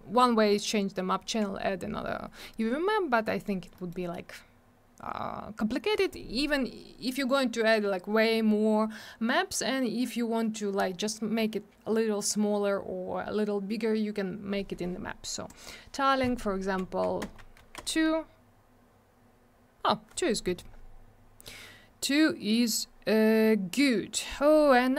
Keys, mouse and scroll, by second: 3.2 middle click, 3.4 middle click, 3.7 middle click, 3.9 middle click, 15.5 click, 15.6 click, 16.8 2, 17.2 Return, 17.4 Tab, 17.6 2, 17.7 Return.